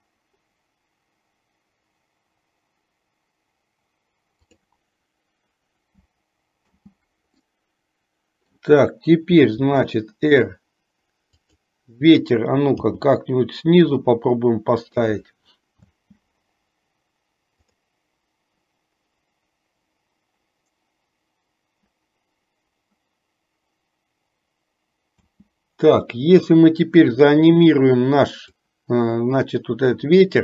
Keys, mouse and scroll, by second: 4.7 click, 7.0 space, 7.7-8.9 middle drag, 9.6 r, 16.2 space, 25.5 space, 28.7-30.2 drag.